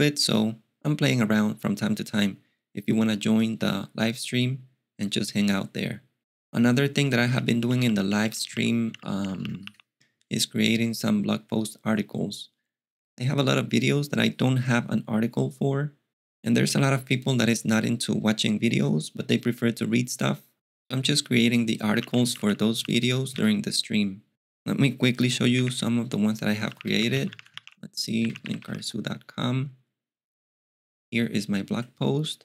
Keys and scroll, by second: 7.0-9.4 typing, 21.6-22.9 typing, 23.3 alt+x, 26.4-29.0 typing.